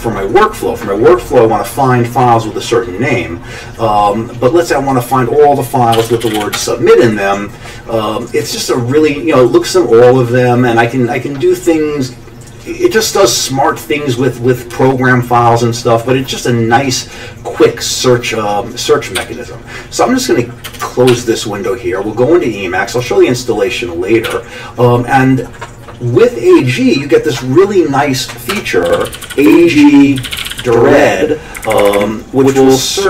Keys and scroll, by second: 5.7-6.9 typing, 19.2 a, 21.2 ctrl+d, 24.3 q, 28.5 Escape, 28.6-31.0 typing, 31.6 Up, 31.7 Up, 31.9 Up.